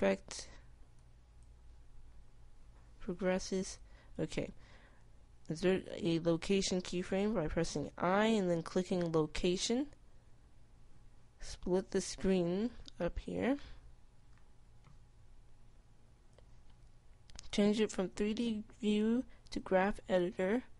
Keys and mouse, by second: 1.2 i, 8.6 i, 13.9-15.3 middle drag, 15.9-20.7 middle drag.